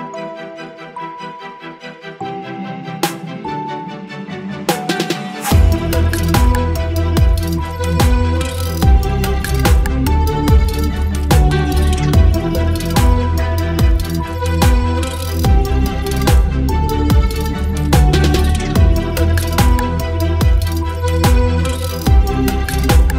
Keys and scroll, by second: 1.8 ctrl+BackSpace, 4.8 space, 9.7 ctrl+BackSpace, 10.2 space, 12.2 Delete, 14.9 space, 15.9 v, 16.5 space, 17.5 ctrl+t, 19.3 Return, 20.1 ctrl+t, 22.6 Return.